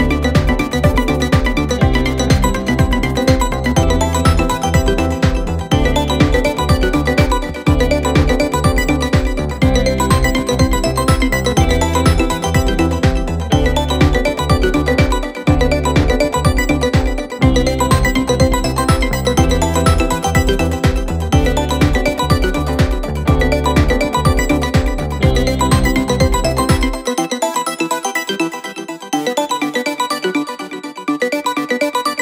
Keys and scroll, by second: 13.8 ctrl+z, 22.7 f, 23.2 f, 28.5 f.